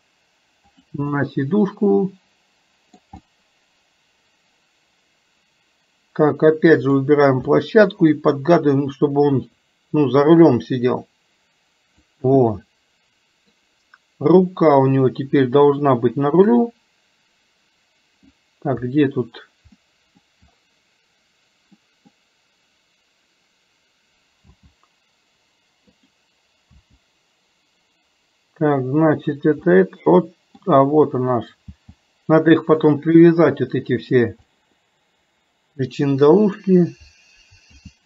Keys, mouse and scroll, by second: 1.1 scroll up 2, 1.2-3.0 middle drag, 3.2 scroll up 2, 3.4-7.0 middle drag, 7.5 scroll up 2, 7.7-8.1 middle drag, 8.1 scroll down 2, 8.5 click, 10.7-12.2 drag, 12.5-13.6 middle drag, 15.1 middle click, 16.6 click, 18.4-18.8 middle drag, 19.9-20.3 middle drag, 22.0 middle click, 26.0 click, 29.8 middle click, 31.3 click, 34.5 scroll up 1, 34.6-36.6 middle drag.